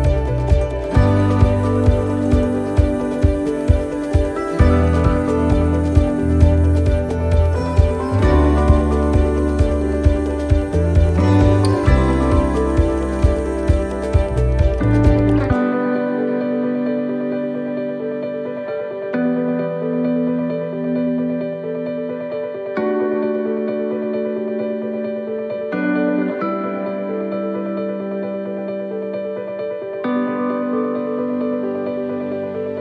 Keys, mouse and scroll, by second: 0.8 right click, 1.3 shift+right click, 3.4 right click, 4.4 shift+right click, 6.4 shift+right click, 8.0 shift+right click, 8.0 middle click, 8.7 middle click, 9.9 e, 14.5 middle click, 15.1 e, 21.2 middle click, 22.9 click, 26.0 middle click, 27.3 e.